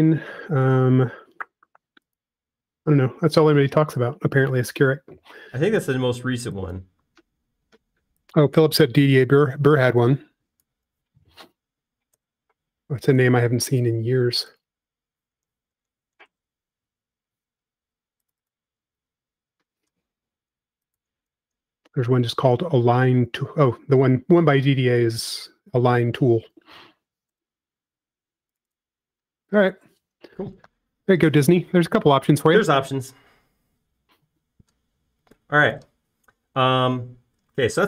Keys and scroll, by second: 3.0 Caps_Lock, 10.7 f, 12.0 typing, 13.1 Return, 14.0 p, 16.2-17.6 typing, 21.5 space, 27.0-27.9 typing, 28.3 Return, 29.0 p, 30.2 space, 31.4 typing.